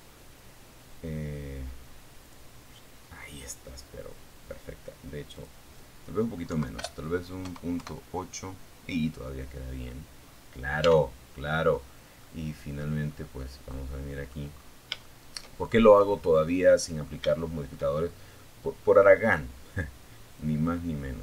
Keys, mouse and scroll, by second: 0.4 click, 3.6 click, 4.7 Right, 5.0 BackSpace, 5.7 KP_0, 6.1 KP_Enter, 8.4-8.9 scroll up 2, 9.0 Tab, 9.9 scroll down 2, 10.4-11.4 middle drag, 11.9 middle click, 12.8-13.2 scroll up 1, 13.2 shift+middle click, 13.9 shift+scroll down 2, 14.2-15.4 middle drag, 15.6 shift+middle click, 16.2 shift+middle click, 17.4 scroll up 1, 18.6-21.2 drag.